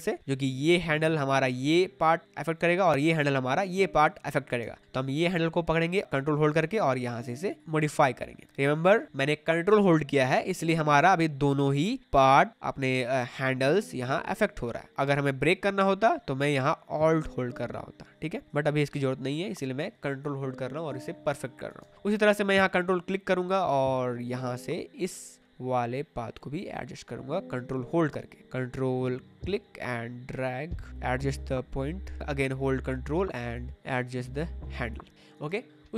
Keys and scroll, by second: 21.7 space, 35.4 space.